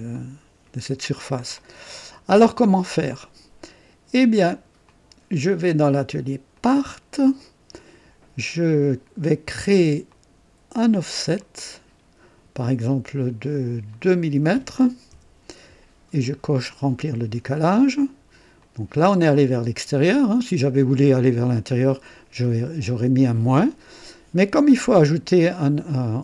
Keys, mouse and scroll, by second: 0.1-0.9 drag, 1.6-2.9 drag, 6.7 click, 10.1 click, 11.4 click, 13.9 click, 15.1 KP_2, 16.8 click, 18.6 click, 19.3-20.8 drag, 24.5 click.